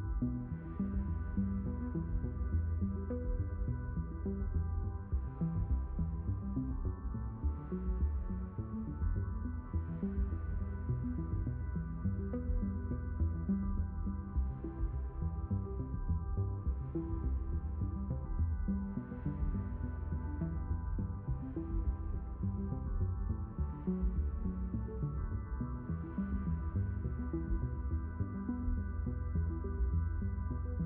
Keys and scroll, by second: 2.0 ctrl+h, 5.4 s, 6.4 shift+., 7.8 b, 9.2 Return.